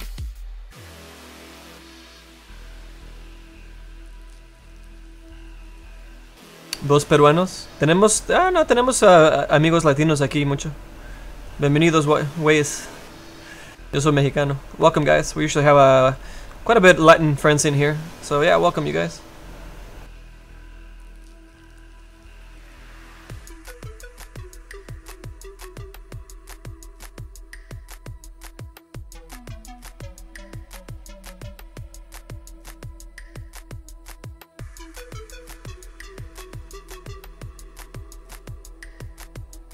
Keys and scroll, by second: 27.2 s.